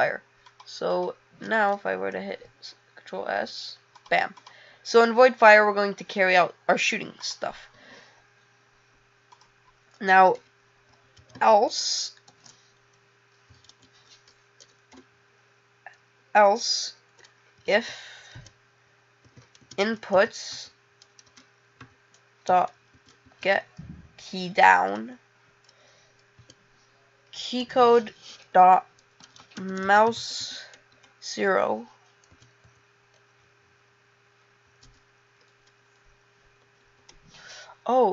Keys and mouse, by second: 4.4 click, 5.0 click.